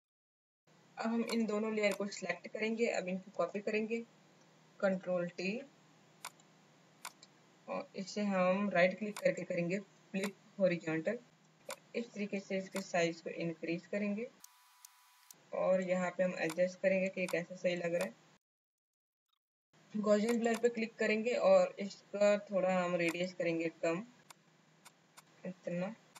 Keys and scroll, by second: 0.3 space, 4.8 ctrl+t.